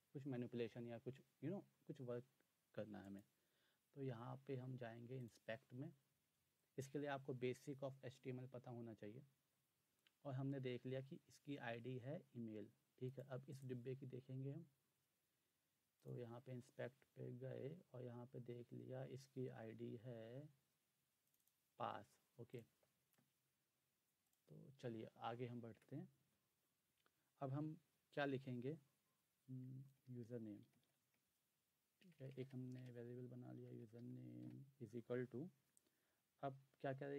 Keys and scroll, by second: 25.7 Return, 29.3-34.9 typing.